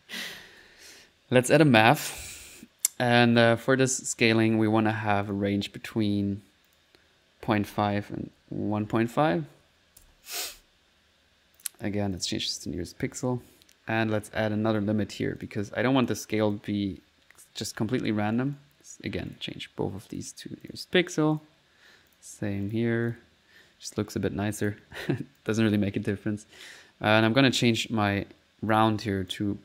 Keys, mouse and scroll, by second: 0.2-0.9 typing, 1.5 click, 2.2 click, 5.3 click, 6.7 click, 11.6-12.9 drag, 13.1 click, 14.2 right click, 14.5-15.3 typing, 15.4 click, 15.6 click, 16.1 click, 16.4 click, 18.3-19.0 typing, 18.4 right click, 19.3 click, 20.2 click, 20.7 click, 21.4 click, 22.1 click, 22.7 click, 23.1 click, 23.8 middle click, 24.6 click, 25.4 click, 27.2 click, 27.8 click, 28.7 click, 29.3 click.